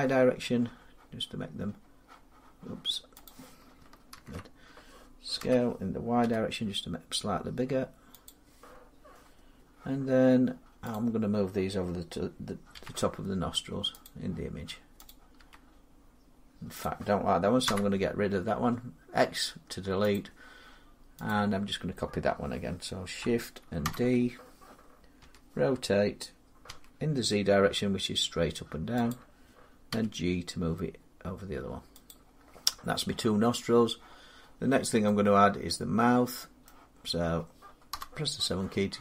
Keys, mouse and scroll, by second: 3.1 click, 4.0 ctrl+z, 5.2-6.9 typing, 8.1 click, 11.1 click, 12.6 g, 13.9 click, 15.2 click, 15.2 g, 16.7 click, 17.5 x, 20.0 click, 21.1 click, 23.7 shift+d, 25.1 r, 26.5 z, 28.9 click, 29.7 g, 31.9 click, 34.5 middle click, 34.6 middle click, 35.5 scroll down 2, 36.5 middle click, 37.7 middle click, 37.7 7.